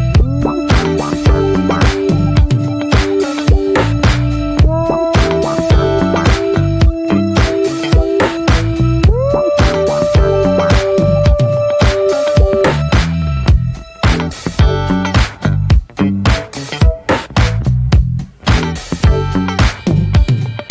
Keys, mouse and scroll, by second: 0.2-0.6 middle drag, 0.6 scroll up 1, 0.9-1.4 middle drag, 1.4-2.1 scroll up 1, 2.1 ctrl+r, 3.5-4.6 shift+middle drag, 4.6 ctrl+r, 6.0 shift+middle click, 6.2-7.2 scroll up 2, 7.2 ctrl+r, 8.6 ctrl+r, 13.8 Tab, 13.9 scroll down 2, 14.1 middle drag, 14.7 click, 14.8 ctrl+1, 15.1 ctrl+2, 15.6 middle click, 16.4-16.9 alt+middle drag, 16.9 click, 17.2-20.0 shift+middle drag, 20.0 click, 20.3 /.